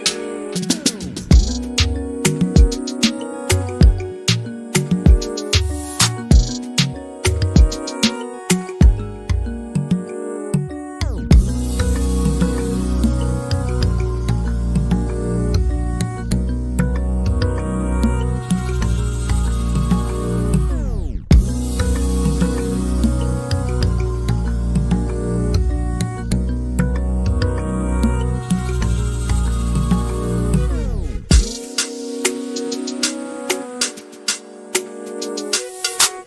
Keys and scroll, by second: 6.7 a, 9.8 e, 11.0 space, 12.1-13.5 typing, 15.5-17.5 typing, 16.5 Delete, 19.0 m, 20.5 s, 22.6-24.4 typing, 27.6 -, 29.1-29.8 typing, 31.5-32.3 typing.